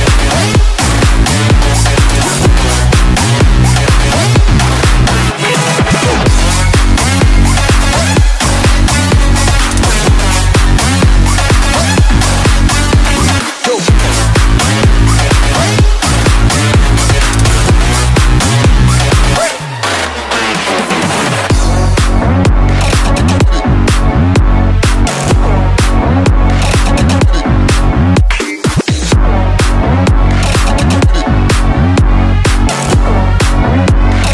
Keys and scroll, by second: 0.3 space, 2.9 ctrl+z, 14.6 space, 15.7 space, 20.0 space, 26.2 space, 30.3 ].